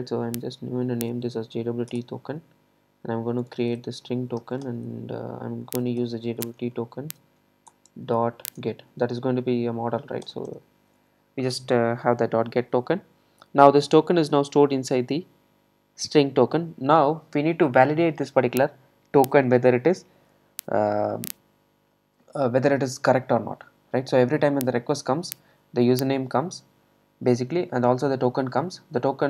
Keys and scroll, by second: 1.9 Return, 7.7 Return.